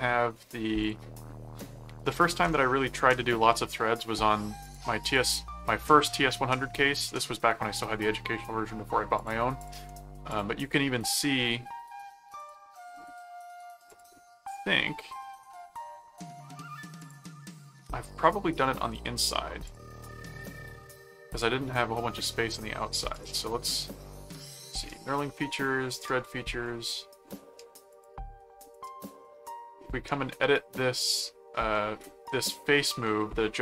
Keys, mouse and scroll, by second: 0.8 click, 4.6 click, 6.8 middle click, 9.1 click, 10.3 click, 12.4 click, 13.9 click, 15.8 middle click, 17.0 click, 19.2 click, 21.3 click, 22.5 click, 23.1 click, 25.9 click, 27.9 click, 28.7 click, 31.7 middle click, 32.6 middle click.